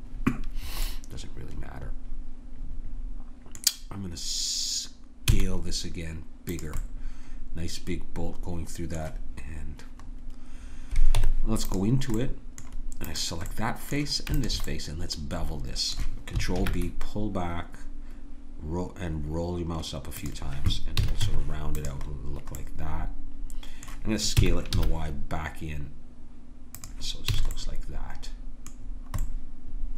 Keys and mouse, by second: 0.9-2.1 middle drag, 5.2 s, 6.8-8.6 middle drag, 10.0-13.1 middle drag, 11.2 Tab, 13.1-14.4 drag, 14.7-16.6 drag, 16.6 ctrl+b, 21.0 a, 21.2 Tab, 22.6 middle click, 24.4 s, 27.4 a, 28.0 click.